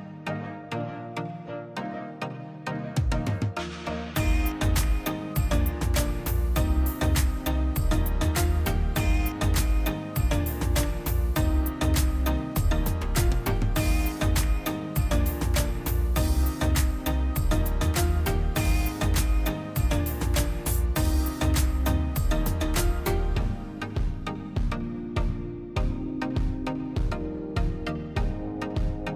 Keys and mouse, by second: 0.6 click, 1.4-2.0 middle drag, 2.0 click, 3.0 click, 3.9 click, 7.5 click, 8.0-8.6 middle drag, 8.6 click, 11.2 q, 12.0 click, 12.4 click, 13.8 click, 14.3 click, 15.3 click, 16.3 shift+d, 17.5-18.0 middle drag, 18.0-18.5 drag, 19.0-19.7 middle drag, 19.7 ctrl+shift+click, 20.4-22.4 middle drag, 22.4 click, 22.7-23.4 drag, 28.3-29.1 drag.